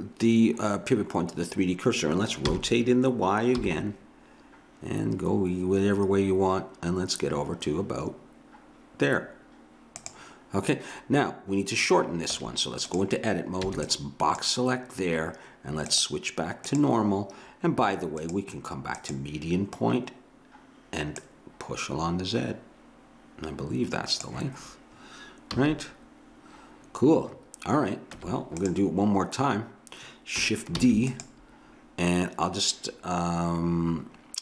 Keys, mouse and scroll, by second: 2.5 r, 12.3 Tab, 13.7 b, 15.9-17.4 drag, 18.2-20.8 drag, 21.2-24.2 drag, 25.5 a, 28.2 Tab, 30.8 shift+d.